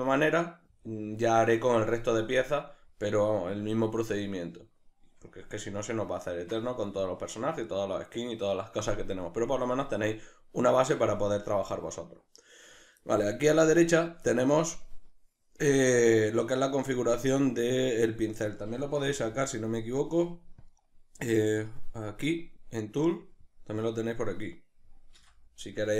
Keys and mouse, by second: 19.1 n, 20.6-25.1 drag, 25.1 n.